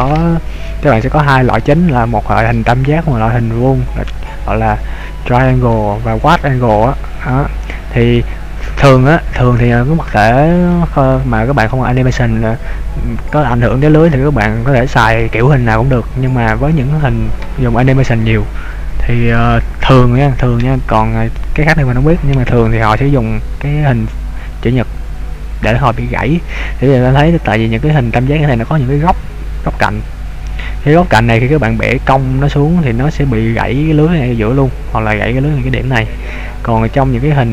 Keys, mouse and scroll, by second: 26.6-27.5 scroll up 1, 27.7-29.5 scroll up 1, 29.5-30.9 scroll down 2, 36.9 middle click.